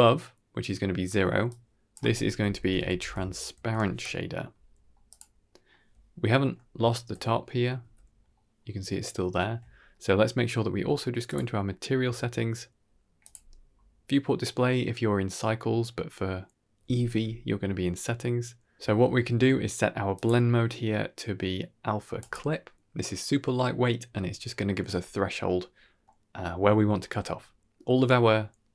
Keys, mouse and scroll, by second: 1.4-2.4 drag, 5.0 middle click, 5.6-6.2 middle drag, 6.4-7.4 middle drag, 6.7 z, 7.6-8.1 middle drag, 7.7 z, 8.9-9.3 shift+middle drag, 11.1 click, 11.8-13.1 scroll down 9, 13.1 click, 13.5-14.2 scroll down 2, 14.2 scroll down 1, 20.0-22.2 drag, 25.9-26.3 middle drag, 27.3 middle click, 27.9 scroll down 1, 28.1 middle click.